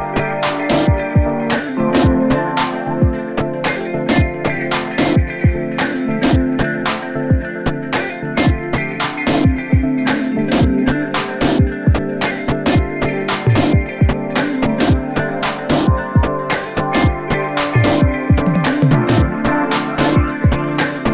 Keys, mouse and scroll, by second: 0.0-1.2 typing, 0.2 scroll down 1, 0.7 scroll up 3, 0.9 scroll down 1, 0.9 shift+middle click, 1.3 scroll up 1, 1.5 shift+middle click, 1.8 scroll up 2, 2.2 shift+middle click, 2.4-11.3 typing, 2.7 shift+middle click, 2.8 scroll up 2, 2.9-3.8 scroll down 5, 3.1 shift+middle click, 3.4 shift+middle click, 3.8 scroll up 2, 4.2 shift+middle click, 4.5-4.9 scroll down 4, 4.9 shift+middle click, 5.9 shift+middle click, 6.4 scroll down 1, 6.5 shift+middle click, 6.6 scroll up 2, 8.0 shift+middle click, 8.0 scroll up 2, 8.4 scroll down 2, 9.0 scroll up 5, 9.3 scroll down 1, 9.4 shift+middle click, 9.8 scroll up 1, 9.9 shift+middle click, 10.5 shift+middle click, 11.5 shift+middle click, 11.6 scroll up 2, 11.7 scroll down 2, 11.9-12.3 shift+middle drag, 12.3-21.1 typing, 12.9-13.5 scroll up 2, 12.9 shift+middle click, 13.5-13.8 scroll down 2, 14.2 shift+middle click, 14.8-15.3 scroll down 3, 14.8 shift+middle click, 15.7 scroll up 2, 15.8-16.3 scroll down 2, 15.9 shift+middle click, 16.7 scroll up 3, 16.8 shift+middle click, 17.2 shift+middle click, 17.9 scroll down 2, 18.0 shift+middle click, 18.9 scroll up 3, 19.4 scroll down 2, 19.5 shift+middle click, 19.8 shift+middle click, 20.1 scroll up 2, 20.3 scroll down 1, 20.4 shift+middle click.